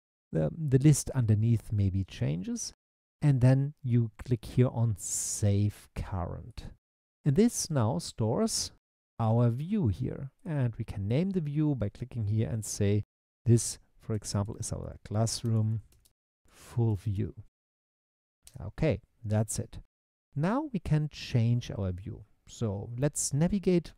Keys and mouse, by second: 6.5 click, 10.4-14.0 drag, 14.0 shift+middle click, 14.3-16.3 drag, 14.8 s, 15.7 o, 16.3 shift+middle click, 16.7 click, 17.0 l.